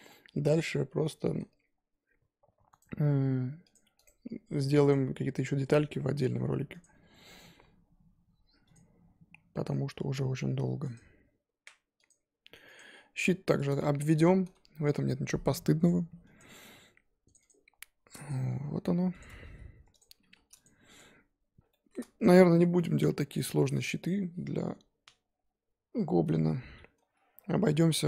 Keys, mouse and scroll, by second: 12.9-13.7 scroll down 4, 13.7 shift+middle click, 14.1 shift+a, 18.0-18.6 scroll up 1, 18.6 scroll up 1, 18.6 g, 19.2 scroll up 2, 19.4 s, 20.9 click, 21.7-22.9 shift+middle drag, 22.9-23.3 scroll up 2.